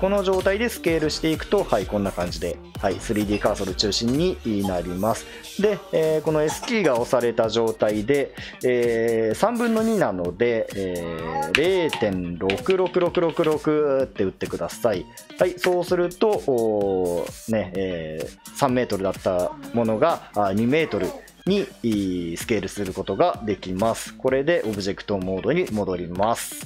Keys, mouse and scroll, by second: 26.2 Tab.